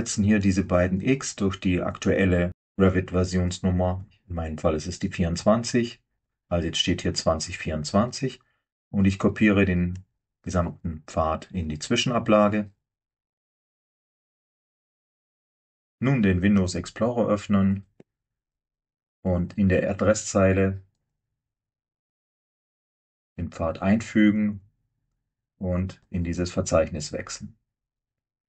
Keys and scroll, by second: 3.9 BackSpace, 4.2 BackSpace, 5.5 4, 10.0-10.7 typing, 15.3 alt+Tab, 16.9 super+e.